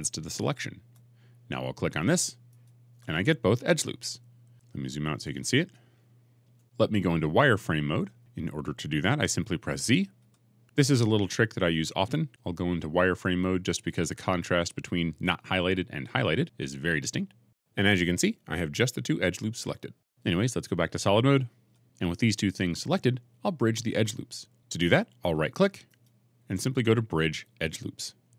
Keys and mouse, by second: 2.5 alt+shift+click, 4.7-6.4 middle drag, 10.1 z, 17.3-21.5 middle drag, 21.5 z, 25.8 right click.